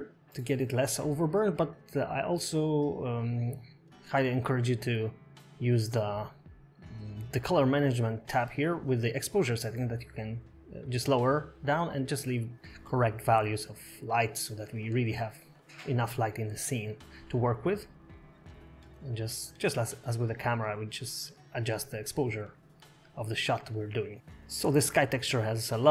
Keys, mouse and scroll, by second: 1.8 scroll up 9, 4.5 click, 10.0 click, 12.9 scroll down 4, 13.9 click, 14.2-14.5 scroll down 3, 14.8 click, 17.2 scroll down 3, 17.4 middle click, 18.4 click, 20.8 KP_0, 24.0 click.